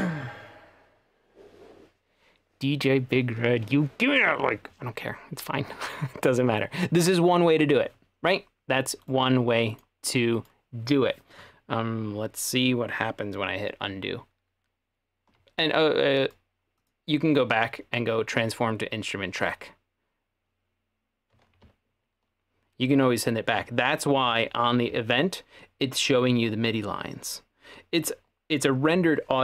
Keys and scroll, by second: 24.3 ⟲.